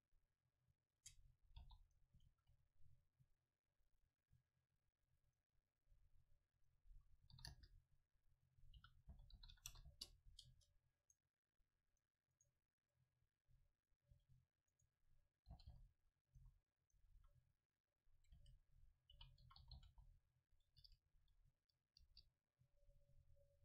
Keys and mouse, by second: 1.0 Tab, 1.6 Delete, 2.5 shift+a, 6.6-8.8 drag, 8.8 r, 10.5 Tab, 11.1-13.2 right drag, 11.9-13.2 drag, 14.2 click, 14.2 e, 15.5 g, 16.4 s, 17.0-18.7 drag, 17.2 a, 18.4 space.